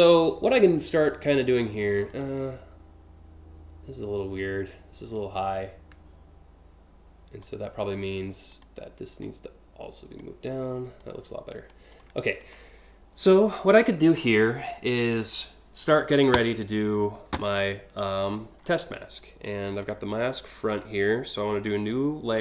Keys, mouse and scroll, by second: 0.6 scroll up 1, 1.7 click, 4.8-7.0 drag, 8.1 click, 8.8 click, 10.6 click, 11.5 click, 12.0 click, 13.1 scroll up 1, 13.8-14.4 scroll down 4, 18.3 scroll up 1, 19.5 click, 19.7 click, 20.9 click.